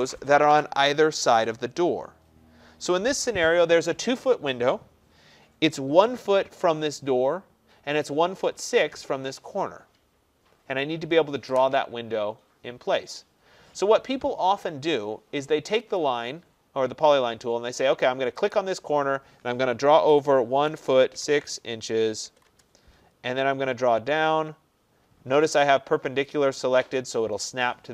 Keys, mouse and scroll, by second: 16.0 click, 18.5 click, 20.1-21.2 typing, 22.3-23.0 typing, 22.5-23.6 drag.